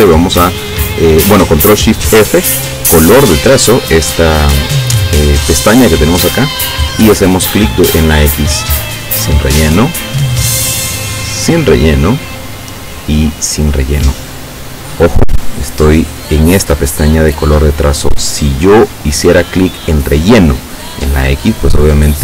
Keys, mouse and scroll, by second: 3.3 click, 8.6 click, 10.3 click, 11.5 click, 12.4 click, 13.4 click, 18.2 click.